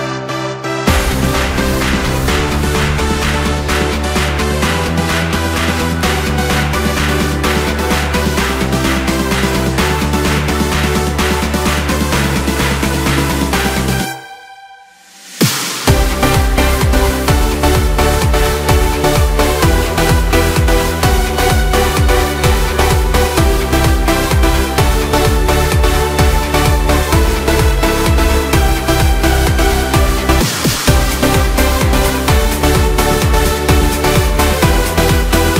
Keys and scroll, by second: 16.2 Return, 25.8 ctrl+z.